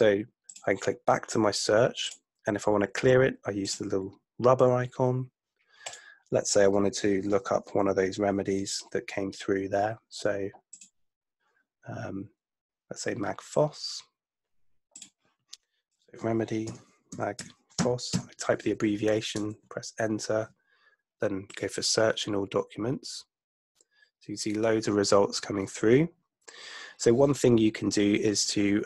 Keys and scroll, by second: 16.8 a, 17.1 g, 17.9 p, 19.5 Return.